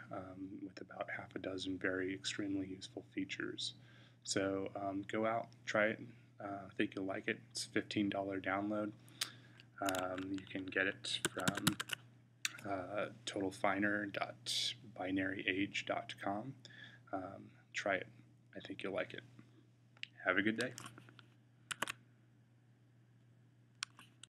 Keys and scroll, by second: 9.8 Tab, 11.1 Tab, 11.3 Tab, 11.5 Tab, 21.6 s.